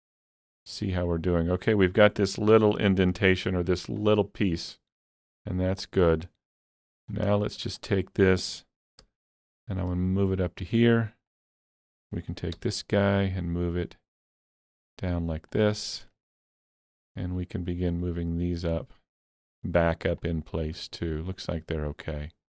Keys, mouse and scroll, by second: 0.3-1.1 scroll up 2, 1.1-6.0 middle drag, 2.5 Tab, 4.0 click, 5.4 KP_3, 6.0-6.8 scroll up 3, 6.8 alt+z, 7.1 scroll up 2, 7.5 shift+middle click, 9.0 g, 10.5 click, 11.3 click, 12.6 g, 15.5 click, 15.5 g, 16.1 shift+middle click, 16.9 click, 17.9-20.2 drag, 20.5 click.